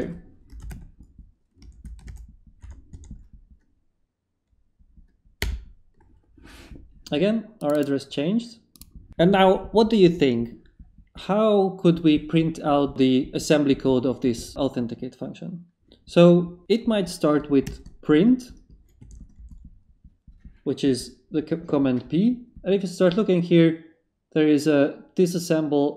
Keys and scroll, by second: 0.0-2.6 typing, 2.0 Tab, 5.4 Return, 17.6 p, 18.7 shift+p, 19.0 shift+/, 19.4 shift+Return, 20.2 Return.